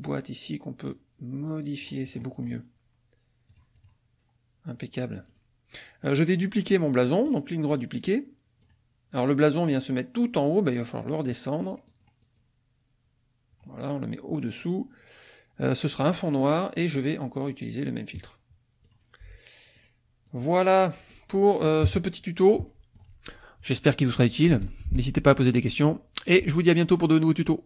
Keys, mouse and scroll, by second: 0.9-2.0 drag, 2.0 click, 3.4 click, 5.3 click, 7.3 click, 8.6 click, 11.0 click, 16.0 click, 18.1 click, 18.8 click, 19.7 click, 20.3 click, 21.1 click, 21.8 KP_Subtract, 22.6 click, 24.6 ctrl+s.